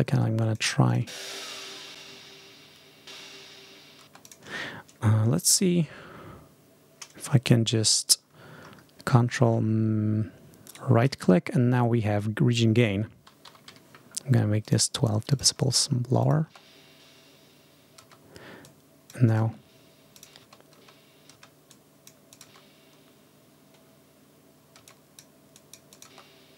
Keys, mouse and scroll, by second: 0.7 click, 0.9 space, 1.4 ctrl+scroll up 2, 3.9 space, 4.1 scroll up 1, 9.4-9.7 ctrl+scroll up 1, 10.5 ctrl+right click, 12.1 click, 13.1-14.0 typing, 14.5 click, 15.2 click, 16.1 scroll up 1, 16.3 space, 17.9 space, 18.5-19.4 scroll up 1, 19.4 space, 20.0 click, 20.3 space, 21.6 click, 22.2 click, 22.3 scroll up 1, 22.5 space, 24.7 space, 24.7 scroll up 1, 24.8 click, 25.4 click, 26.1 space.